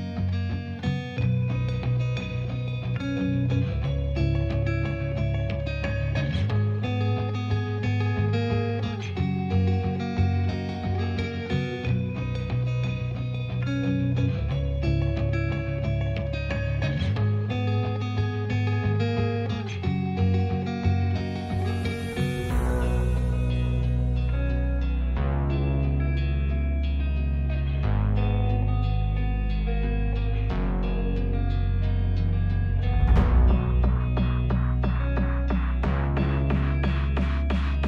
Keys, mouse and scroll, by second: 0.5 s, 4.4 click, 5.4-7.1 drag, 7.6-8.6 drag, 9.2 click, 10.3 click, 10.9 s, 11.5 click, 12.5 g, 12.9 middle click, 15.2 w, 16.3 click, 16.5 middle click, 17.4 s, 18.5 click, 20.4 click, 21.9 click, 23.0 click, 24.8 click, 26.8 click, 27.8 click, 30.4 click, 31.7 click, 32.4 click, 34.3 click, 36.1 click, 36.8 space.